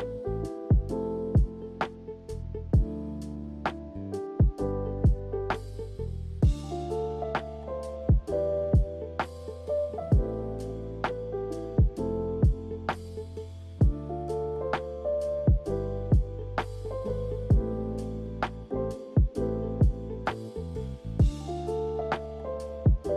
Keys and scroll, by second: 5.1 1, 8.0 typing.